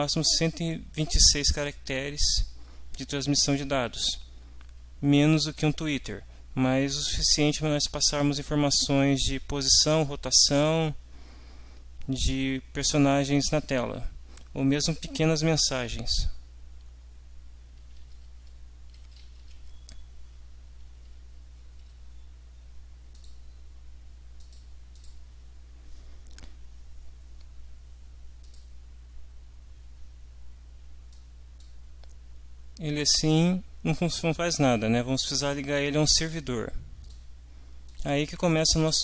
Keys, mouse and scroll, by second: 16.4 Down, 19.1 Up, 20.6 Page_Down, 21.9 Page_Up, 23.2 click, 24.4 click, 24.9 click, 28.4 click, 31.1 click, 37.0 click, 37.8 click.